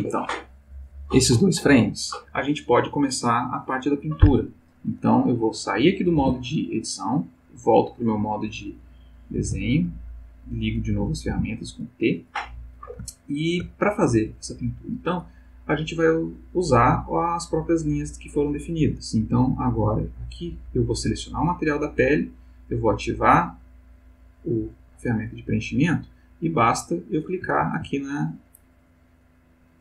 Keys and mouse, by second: 6.1 Tab, 9.4 t, 10.9 t, 13.1 ctrl+middle click, 14.6 click, 20.3 click, 23.4 click, 25.2 click, 27.6 ctrl+z, 28.5 click.